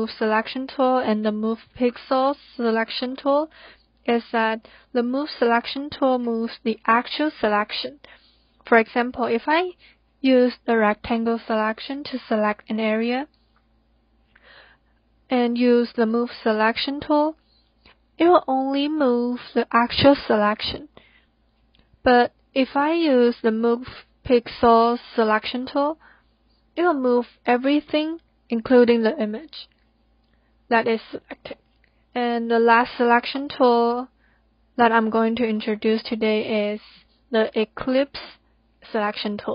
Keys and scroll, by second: 33.7 ctrl+z, 34.6 ctrl+z.